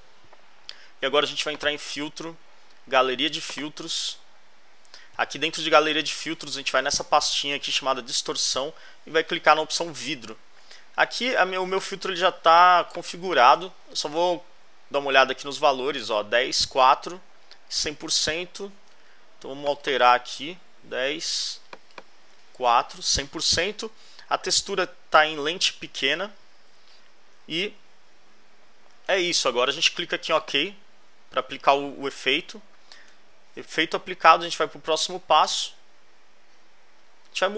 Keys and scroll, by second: 14.1 alt+Left, 18.0 alt+Right, 20.1-21.0 typing, 22.3 4, 27.6 alt+Left, 32.5 alt+Left.